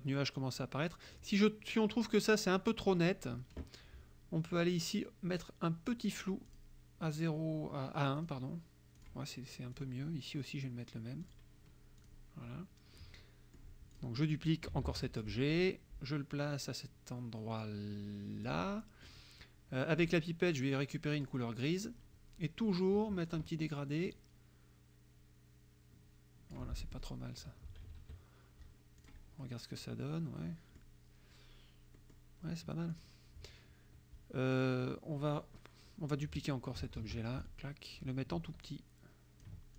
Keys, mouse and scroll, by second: 1.1 click, 2.7 click, 6.5 click, 8.2 click, 9.0 click, 9.8 click, 11.3 click, 12.0 click, 13.0 click, 14.0 click, 14.9 ctrl+d, 15.2-19.3 ctrl+drag, 20.0 click, 21.2 click, 23.3 click, 24.2-26.8 drag, 26.9 F1, 27.7 KP_Subtract, 29.1 click, 29.5 click, 30.4 click, 32.0 click, 33.0 click, 37.0 ctrl+d, 37.4 ctrl+click, 38.7 ctrl+click.